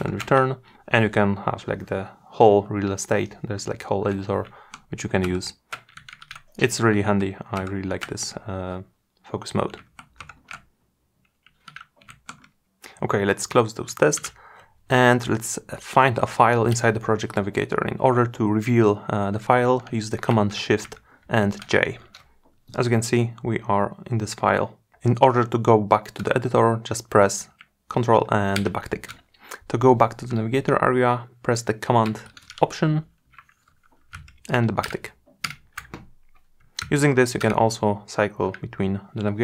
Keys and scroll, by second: 20.0 shift+super+j, 27.8 ctrl+`, 31.1 alt+super+`.